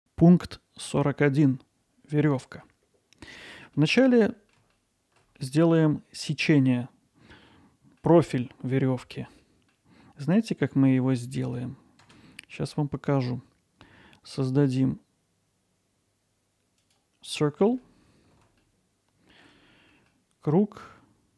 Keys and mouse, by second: 2.6-3.8 middle drag, 3.9 middle drag, 4.3 alt+middle click, 4.7-5.2 ctrl+alt+middle drag, 5.4-5.7 middle drag, 7.5-8.0 middle drag, 9.4-9.7 middle drag, 10.7-11.2 middle drag, 17.4-17.8 middle drag, 18.6-19.4 ctrl+alt+middle drag, 19.9 middle drag.